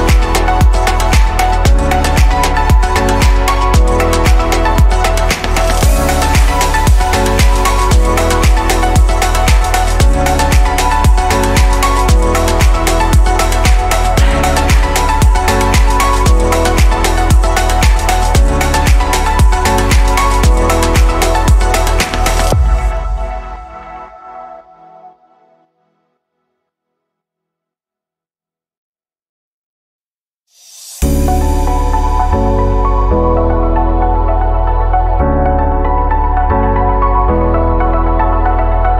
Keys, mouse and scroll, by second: 3.3 click, 4.9 click, 6.8-7.9 drag, 8.3 click, 9.6-10.9 drag, 11.9-13.4 drag, 15.1 Delete, 16.0 click, 16.6 click, 18.3-19.9 drag, 21.1-23.0 drag, 23.9 click, 25.3-26.8 drag, 27.9 click, 28.8 click, 30.6-31.3 right drag, 31.3 click, 31.9 click, 32.1-35.3 right drag, 36.3-37.9 middle drag, 37.9 click, 38.7-38.9 shift+middle drag.